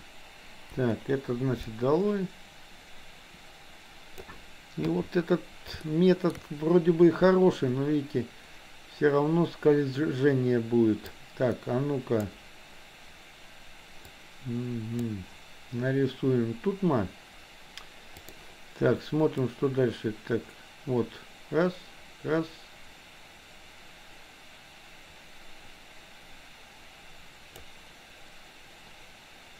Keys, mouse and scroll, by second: 0.8 Delete, 1.8-4.4 drag, 4.9 KP_3, 5.9 shift+middle click, 11.0-12.4 drag, 14.1 click, 18.1 click, 19.4-27.8 drag.